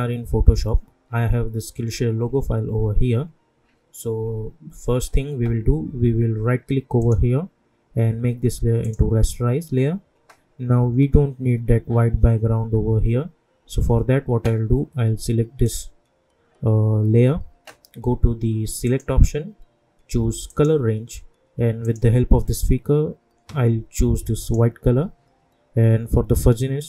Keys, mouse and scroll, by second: 7.0 right click, 8.8 click, 15.6 click, 18.8 click, 24.4 click.